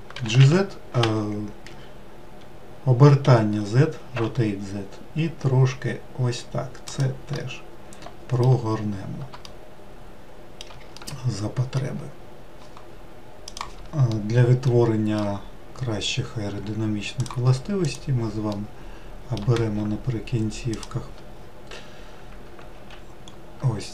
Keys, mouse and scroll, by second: 0.0 g, 3.1 r, 7.2-13.6 middle drag, 14.1-17.2 middle drag, 17.2 click, 18.5-20.8 middle drag, 20.8 shift+click, 22.8 ctrl+z, 23.3 scroll up 2.